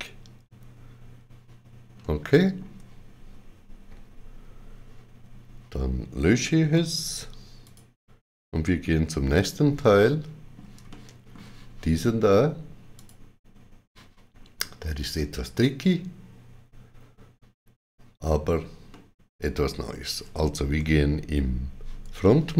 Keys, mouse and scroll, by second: 1.9 middle click, 1.9 scroll down 1, 3.8 shift+w, 6.6 5, 7.5 click, 9.2 x, 9.9 middle click, 10.8 shift+middle click, 12.8 click, 18.8 shift+middle click, 22.1 shift+middle click.